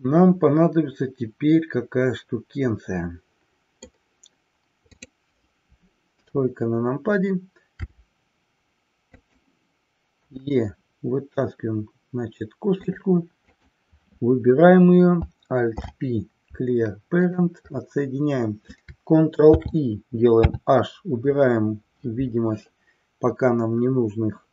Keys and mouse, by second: 5.0 click, 6.2 KP_3, 7.7 r, 9.1 click, 13.0 click, 13.5 click, 15.7 alt+p, 19.5 ctrl+i, 20.5 h.